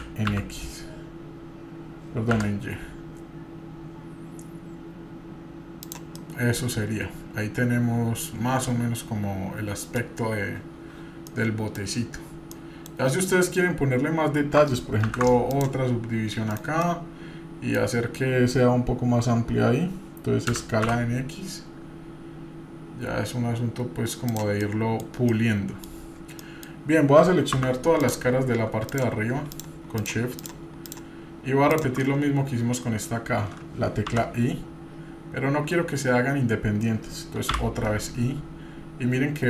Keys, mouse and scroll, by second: 6.2-10.0 middle drag, 11.3 middle click, 12.5 middle click, 15.0 ctrl+r, 16.8 middle click, 21.8 s, 24.6 middle click, 25.0 scroll down 1, 25.3 middle click, 26.0-26.4 scroll up 2, 26.4 middle click, 26.4 scroll down 2, 27.2-27.5 scroll up 2, 27.5 3, 28.0 click, 28.9 click, 29.5 shift+click, 30.0-31.9 shift+drag, 32.0 shift+click.